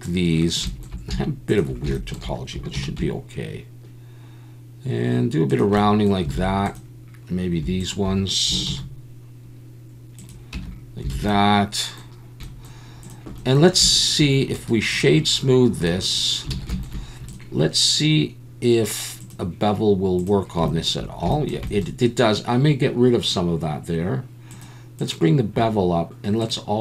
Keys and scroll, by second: 2.7 ctrl+b, 6.3 alt+a, 8.7 ctrl+b, 10.5 Tab, 11.1 alt+a, 16.6 alt+a.